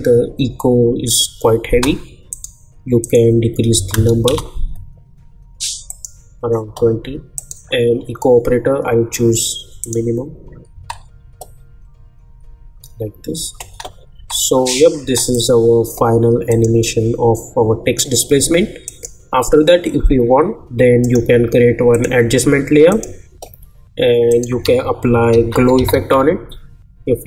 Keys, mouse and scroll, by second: 1.6 space, 2.3 click, 5.8 click, 10.7 space, 13.6 space, 15.3 click, 19.1 click, 21.2 right click, 21.9 click, 24.6 ctrl+a, 25.1-26.4 typing.